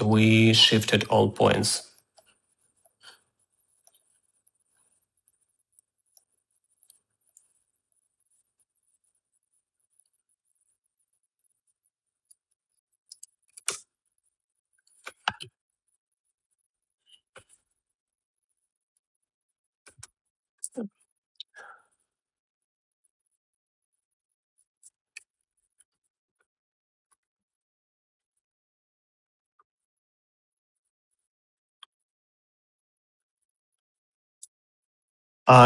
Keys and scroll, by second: 13.6-14.6 typing, 21.0 shift+s, 21.0 BackSpace, 23.1-30.6 typing, 34.5 Right, 34.8-35.6 typing.